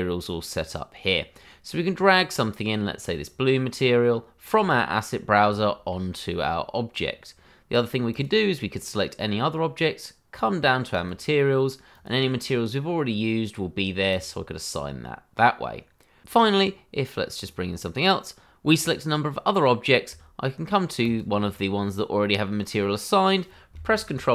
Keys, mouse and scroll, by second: 0.5-1.1 scroll down 1, 1.1-2.3 scroll up 1, 2.4 click, 5.0-5.4 scroll down 1, 5.6 shift+middle click, 8.1 click, 10.9 click, 14.1 click, 17.4 click, 21.0 shift+click, 23.8 ctrl+l.